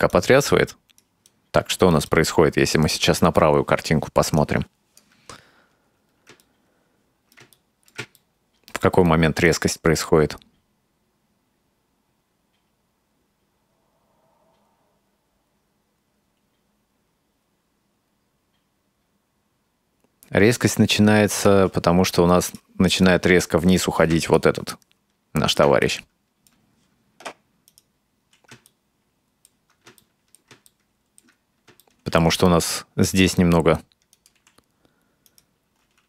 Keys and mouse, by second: 0.1-1.1 right drag, 1.3 click, 2.2-2.8 shift+middle drag, 4.4 click, 6.4-7.5 ctrl+middle drag, 7.6-7.9 shift+middle drag, 8.2-8.9 ctrl+middle drag, 9.5-21.5 drag, 22.5 right click, 22.9 right click, 24.4-25.6 ctrl+middle drag, 25.9 shift+middle click, 27.7 right click, 28.7 ctrl+middle click, 30.0 shift+middle click, 30.8 ctrl+middle click, 31.8 shift+middle click, 33.2 r, 34.4 r, 35.9 s.